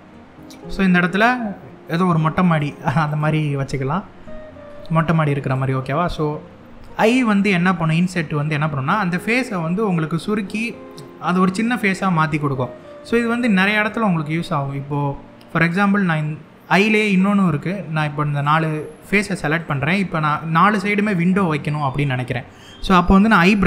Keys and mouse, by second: 1.5 click, 2.2 click, 2.7 click, 3.2 middle click, 4.5 middle click, 5.1 click, 5.8 middle click, 7.1 middle click, 12.3 middle click, 13.0-14.5 middle drag, 15.2 click, 16.8 shift+click, 17.3 middle click, 18.4 middle click, 19.2 shift+click, 19.9 middle click, 20.8 middle click, 21.9 middle click.